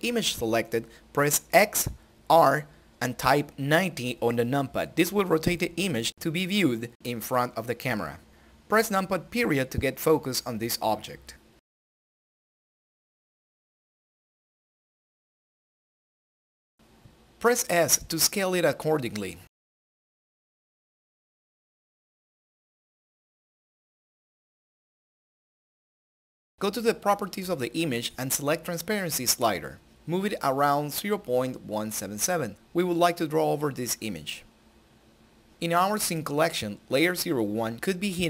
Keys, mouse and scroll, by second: 5.3 click, 7.0-7.8 typing, 12.8-14.8 scroll down 1, 16.0 s, 19.3 click, 20.1 scroll down 1, 21.1-21.9 scroll up 1, 21.9 s, 23.0 Escape, 24.7 s, 25.9 click, 29.7-35.5 drag, 35.7 click.